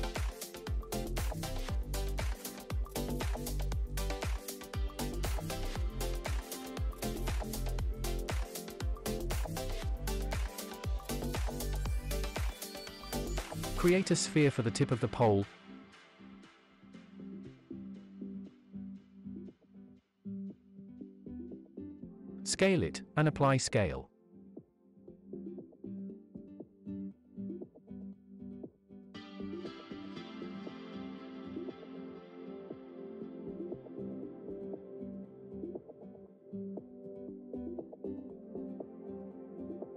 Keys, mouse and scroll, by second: 2.5 shift+s, 5.6 Tab, 8.3 click, 12.5 shift+a, 15.0-15.6 scroll down 3, 15.6-16.3 middle drag, 17.2-18.3 drag, 20.7 KP_1, 21.9 s, 26.5 click, 27.6 ctrl+a, 29.2-29.6 shift+middle drag, 29.8 shift+middle drag, 31.0-31.6 middle drag, 31.8 shift+middle drag, 32.4 space, 34.5 space, 37.8 click.